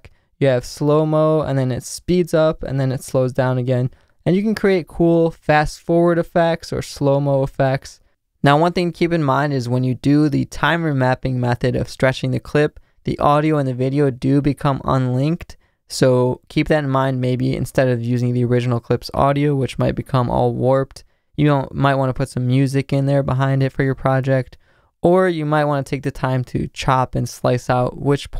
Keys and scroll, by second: 4.7 space, 26.8 c.